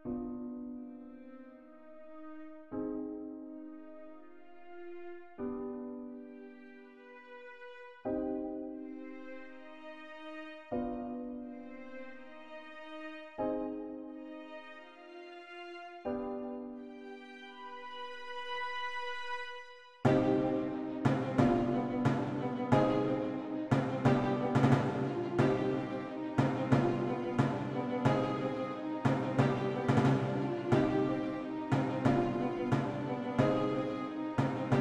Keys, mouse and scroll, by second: 2.2 click, 5.7 click, 8.3-8.8 typing, 12.2 click, 15.4-15.9 typing, 17.9-20.0 typing, 22.0 click, 26.7 click, 27.9 3, 34.2 click.